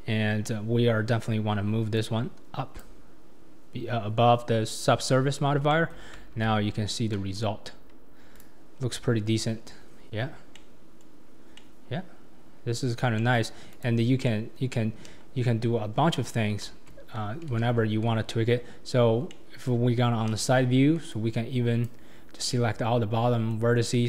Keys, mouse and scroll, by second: 0.0-2.0 scroll up 2, 2.0-2.8 drag, 5.1 scroll up 4, 5.7 shift+middle click, 6.3 alt+z, 6.7-7.2 scroll down 4, 7.2 Tab, 7.8 scroll down 2, 8.3 click, 8.8-10.5 scroll down 3, 10.5-11.2 middle drag, 11.2 scroll up 4, 11.6-13.7 middle drag, 13.7 click, 14.2-15.0 middle drag, 15.0 KP_3, 15.9 scroll up 3, 16.7 Tab, 17.5 alt+z, 19.2 scroll down 1, 19.3-20.3 middle drag, 20.3 KP_3, 21.1 click, 22.5-23.9 middle drag, 23.9 KP_7.